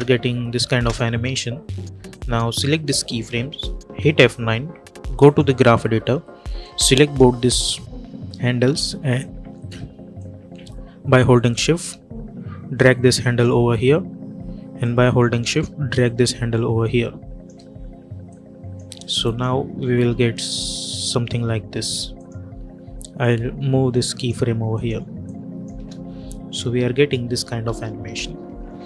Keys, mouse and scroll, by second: 2.0-3.8 drag, 3.8 F9, 5.1-10.0 drag, 10.0-14.7 drag, 14.7-19.1 drag, 19.7 space, 21.6 space, 22.0-25.6 drag, 25.6 space.